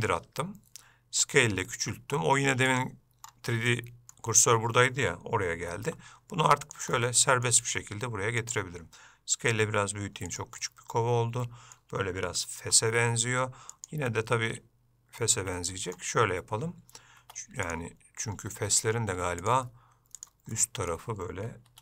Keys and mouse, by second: 3.9 shift+middle click, 7.2 middle click, 7.8 g, 9.6 g, 10.8-12.0 middle drag, 14.3-16.2 middle drag, 17.4 Tab, 20.8 middle click.